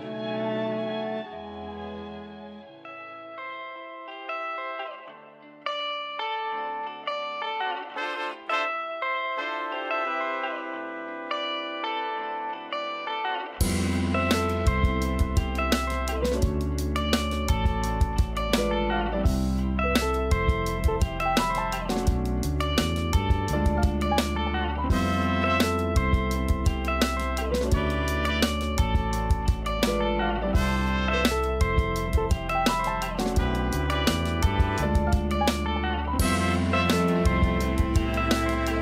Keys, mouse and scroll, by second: 0.1 g, 1.1-1.6 scroll down 1, 1.6 Tab, 2.4 Tab, 3.2 shift+d, 3.8 g, 5.5-5.8 scroll down 3, 5.8 a, 6.0 a, 6.3 scroll down 1, 7.5 a, 7.9 a, 9.3 click, 11.2 l, 11.9-12.5 scroll down 1, 12.5 shift+d, 13.1 g, 14.6 scroll up 3, 15.0 shift+middle click, 15.7 scroll up 2, 16.3 g, 18.3 a, 19.0 click, 19.8 ctrl+r, 24.0-24.6 scroll down 5, 24.6 a, 24.8 a, 25.2-26.3 shift+middle drag, 26.3 l, 26.7-27.5 scroll down 1, 27.5 shift+d, 28.1 r, 31.0 g, 32.4 scroll up 3, 32.7 shift+middle click, 33.2 scroll up 1, 33.5 g, 35.3 scroll down 2, 35.6 a, 35.8 a, 36.0-36.3 scroll down 1, 36.3-38.6 shift+middle drag, 38.6 Tab.